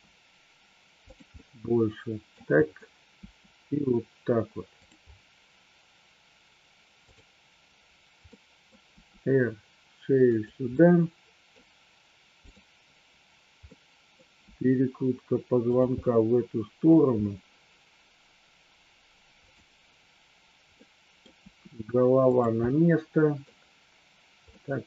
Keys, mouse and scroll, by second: 1.1 click, 1.3-2.3 middle drag, 3.2 r, 4.7 click, 8.2-8.6 middle drag, 9.0 r, 10.3 click, 10.7 middle click, 12.5 click, 13.7 middle click, 14.3 r, 15.7 click, 16.0-17.0 middle drag, 20.8 middle click, 21.3 r, 22.2 click, 22.6 middle click, 24.6-24.8 middle drag.